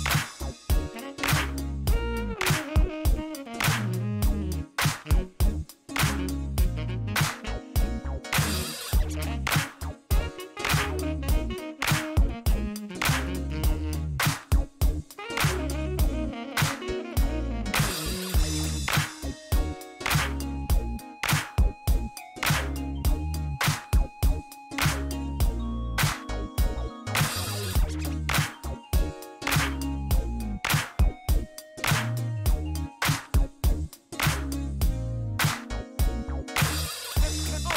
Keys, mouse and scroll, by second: 0.3 middle click, 1.2 shift+middle click, 1.5 shift+right click, 4.5 shift+scroll down 2, 4.8 middle click, 5.5 shift+right click, 7.0 middle click, 7.7 shift+middle click, 8.2 shift+right click, 9.5 shift+right click, 11.5 scroll down 1, 13.2 click, 14.0 click, 15.5 click, 16.2 click, 17.2 middle click, 18.5 click, 20.1 click, 21.5 click, 22.5 click, 23.6 click, 23.9 right click, 25.4 click, 26.6 click, 27.7 click, 29.3 click, 30.9 click, 31.9 Delete, 34.6 click, 34.8 right click, 35.2 click, 37.0 click.